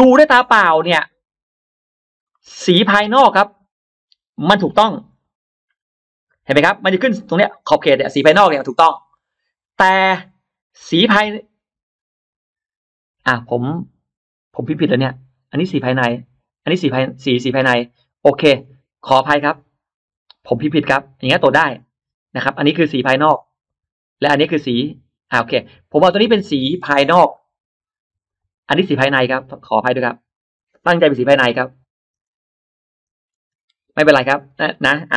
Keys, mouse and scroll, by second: 0.3-1.2 scroll down 2, 0.4 middle click, 1.7-2.0 scroll up 1, 2.2 middle click, 3.3 click, 5.3 ctrl+super+middle click, 6.1 ctrl+middle click, 9.8-10.5 drag, 14.4 click, 17.0 click, 18.5 click, 20.7-21.7 drag, 28.1 click, 30.2 click, 31.7 BackSpace, 32.0 BackSpace, 33.9 BackSpace.